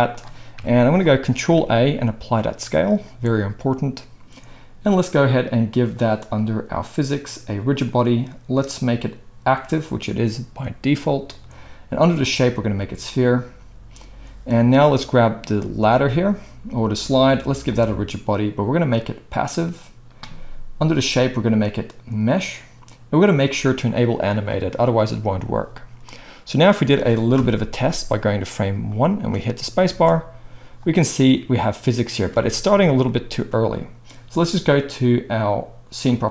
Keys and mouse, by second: 0.5 KP_1, 1.3 ctrl+a, 5.6-6.9 drag, 6.9 middle click, 7.7-15.2 drag, 15.2-17.8 middle drag, 17.8-24.0 drag, 24.0-28.9 middle drag, 27.3 KP_0, 28.9-36.3 drag, 29.9 space, 32.3 space.